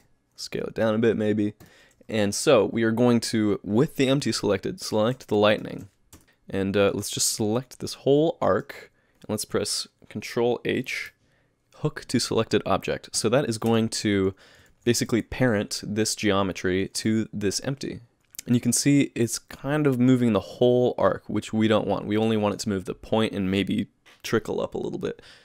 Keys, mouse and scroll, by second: 0.5 s, 5.5 shift+click, 6.1 Tab, 6.2 middle click, 6.2-6.5 scroll down 3, 7.4 click, 10.9 ctrl+h, 13.7 Tab, 14.7 alt+a, 15.1 z, 17.0 click, 17.5 g, 18.6 g.